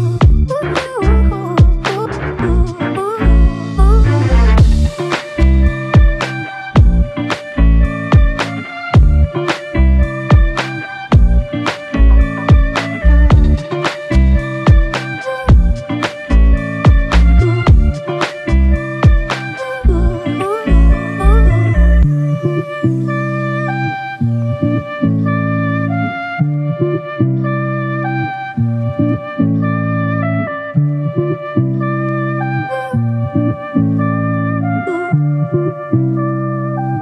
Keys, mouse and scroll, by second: 1.1 alt+click, 2.5 double click, 5.3 alt+click, 6.4 double click, 9.2 alt+click, 11.9 alt+click, 14.1 shift+click, 15.9 double click, 16.6 alt+click, 18.7 alt+click, 20.3 double click, 20.8 alt+shift+click, 21.5 alt+click, 24.4 f, 25.8 alt+click, 25.9 alt+double click, 27.0 ctrl+alt+click, 34.3 ctrl+alt+click, 36.4 alt+click.